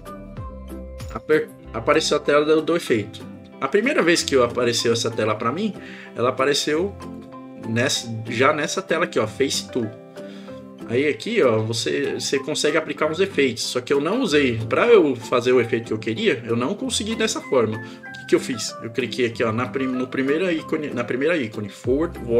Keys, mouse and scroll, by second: 7.2 click.